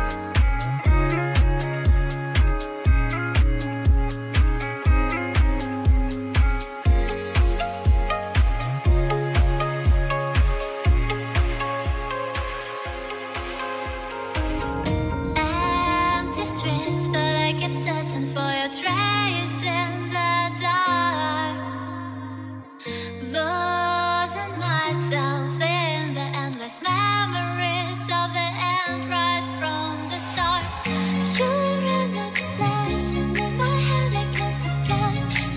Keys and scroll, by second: 4.8 ctrl+space, 10.1 ctrl+space, 29.9 ctrl+space.